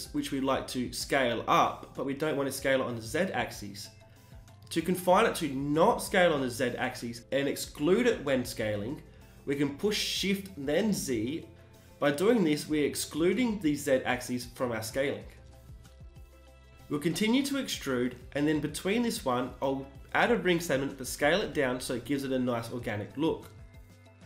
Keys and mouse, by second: 10.6 s, 14.1-15.2 drag, 14.9 e, 15.3 g, 17.3 s, 19.3 ctrl+r, 20.1 s, 22.3 Tab, 23.7 n.